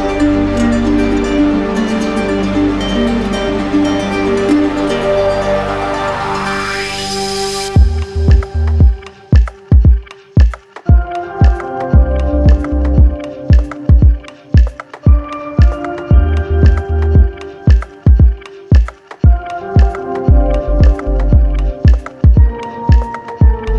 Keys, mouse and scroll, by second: 0.1 shift+click, 0.4 shift+click, 0.7 shift+click, 1.7 shift+click, 2.2 z, 2.9 click, 4.8 click, 5.1 ctrl+z, 6.2 click, 7.4 click, 9.9 shift+click, 10.5 alt+right click, 11.6 shift+click, 12.2 alt+right click, 13.3 shift+click, 14.0 right click, 15.1 right click, 16.6 right click, 17.1 shift+right click, 18.0 right click, 18.5 right click, 18.6 shift+right click, 19.1 alt+right click, 19.3 alt+right click, 19.6 right click, 20.0 right click, 20.0 alt+right click, 21.0 right click.